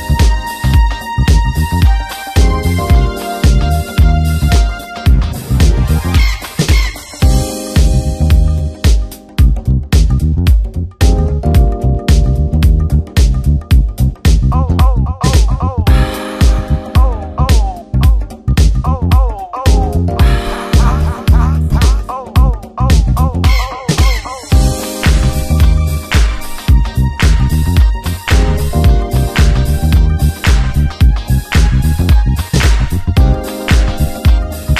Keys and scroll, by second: 0.4 ctrl+d, 0.6 ctrl+KP_Subtract, 1.5 ctrl+w, 1.8 Return, 3.7 space, 4.2 c, 4.7 Return, 5.8 alt+i, 6.0 alt+a, 6.6 shift+F2, 6.8 ctrl+space, 7.8 w, 10.6 Return, 11.3 shift+F2, 12.6 ctrl+d, 12.8 ctrl+space, 15.0 ctrl+alt+d, 15.3 Return, 16.0 shift+F2, 16.4 ctrl+d, 16.5 ctrl+KP_Add, 16.8 ctrl+g, 18.0 ctrl+space, 18.7 Return, 22.3 ctrl+space, 23.6 s, 24.5 Return, 25.2 shift+F2, 25.8 space.